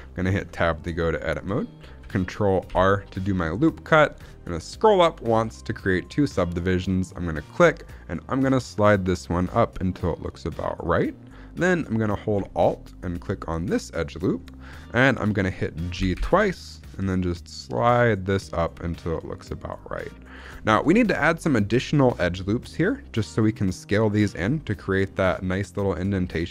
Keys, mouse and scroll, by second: 0.3 Tab, 0.6 shift+middle click, 0.9-1.9 scroll up 1, 2.6 ctrl+r, 10.7 click, 13.5 alt+click, 15.8 g, 16.1 g, 20.2 click, 20.5 shift+middle click, 20.8-21.1 scroll up 2, 21.1-22.6 shift+middle drag, 22.6-23.2 scroll up 1, 26.3 scroll down 1.